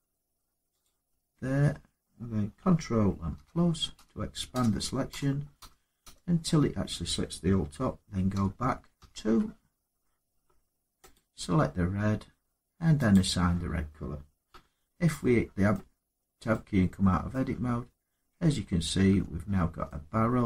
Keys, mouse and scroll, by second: 0.6 click, 3.1 ctrl++, 3.7 ctrl++, 4.3 ctrl++, 4.9 ctrl++, 5.3 ctrl++, 8.1 ctrl+-, 8.7 ctrl+-, 10.9 click, 12.9 click, 14.3 Tab, 14.9 middle click, 15.5 middle click, 15.9 middle click, 15.9 middle click, 17.1 middle click, 18.1 Tab, 18.9 Tab, 20.2 middle click, 20.4 middle click.